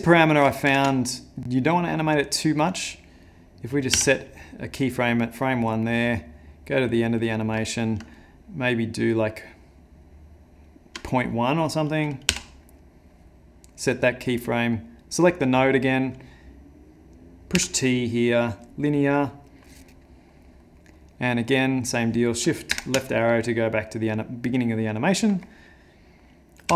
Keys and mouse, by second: 0.7 shift+Left, 6.6 click, 6.6 i, 8.1 shift+click, 14.4 middle click, 14.4 i, 15.0 click, 17.5 t, 20.1 middle click, 20.5 middle click, 20.8 middle click, 21.1 middle click, 22.8 shift+Left.